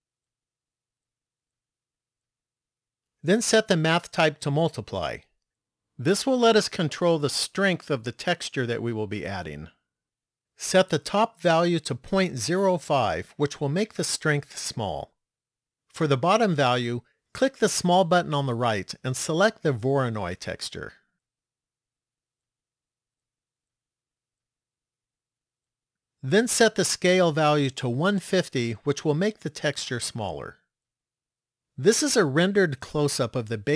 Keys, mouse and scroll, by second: 1.4 click, 3.5 click, 10.5 click, 17.8 click, 25.8 click, 27.9 click.